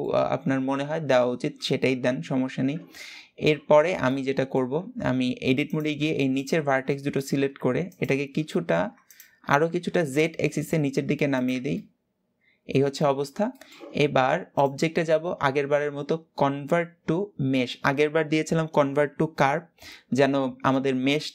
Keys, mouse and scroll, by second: 3.4-3.7 scroll down 1, 3.7-4.5 middle drag, 4.5 Tab, 4.7-5.3 scroll up 1, 5.3 click, 6.0 shift+click, 6.6-7.6 shift+middle drag, 7.6 shift+click, 8.2 middle click, 8.7 shift+click, 9.3 g, 11.2 Tab, 11.4-12.9 middle drag, 12.9-13.2 scroll down 1, 13.2-14.2 shift+middle drag, 14.2-17.3 drag.